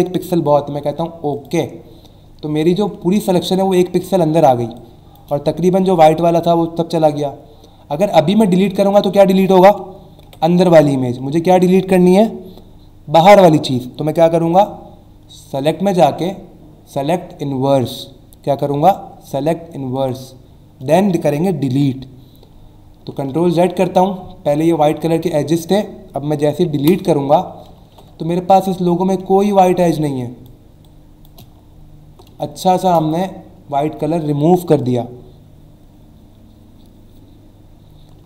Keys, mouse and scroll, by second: 1.3 click, 2.2 alt+scroll up 1, 2.8 alt+scroll up 1, 4.6 space, 4.7 click, 5.1 space, 5.4 alt+scroll up 1, 6.5-7.1 alt+scroll down 2, 8.3-9.0 alt+scroll down 2, 9.1 alt+scroll up 1, 10.2 Delete, 11.3 ctrl+z, 15.6 click, 19.9 click, 21.7 Delete, 22.6 alt+scroll up 1, 23.3 ctrl+z, 23.8-24.3 alt+scroll up 2, 24.6 space, 24.7 click, 25.1 space, 26.8 Delete, 27.8 ctrl+d, 28.2-28.9 alt+scroll down 2, 29.2 space, 29.5 click, 29.8 space, 30.3 click, 30.3 space, 30.8 space, 31.5-32.1 scroll down 2, 32.4 click, 32.8 space, 38.2 alt+Num_Lock.